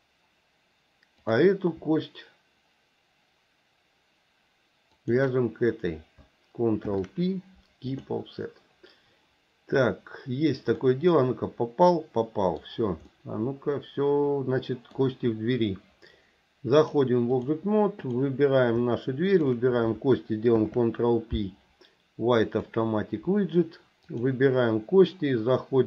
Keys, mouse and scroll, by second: 1.2 click, 5.0 shift+click, 6.9 ctrl+p, 10.9-12.6 middle drag, 13.1-15.0 middle drag, 16.7 click, 18.0 click, 19.3 shift+click, 20.6 ctrl+p, 24.1 click.